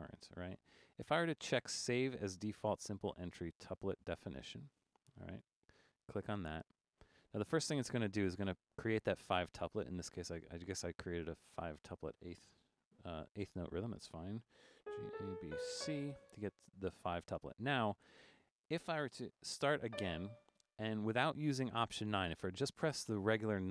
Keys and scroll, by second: 14.6-16.3 typing, 20.0 d.